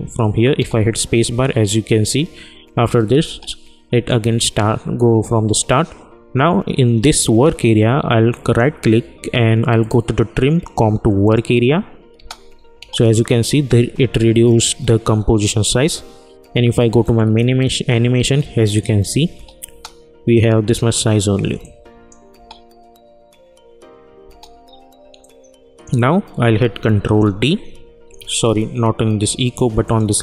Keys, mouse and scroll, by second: 0.5 space, 3.2 space, 8.4 right click, 11.2 click, 12.1 space, 17.0 click, 19.3 space, 21.6 click, 22.3 space, 24.2 space, 25.2-27.0 drag, 27.0 ctrl+d, 28.4 ctrl+z, 29.8 click.